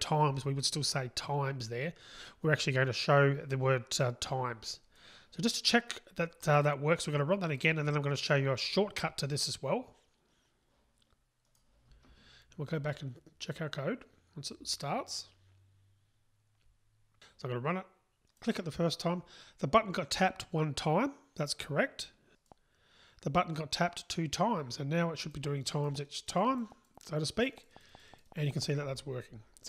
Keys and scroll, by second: 7.7 ctrl+shift+r, 11.9 ctrl+shift+r.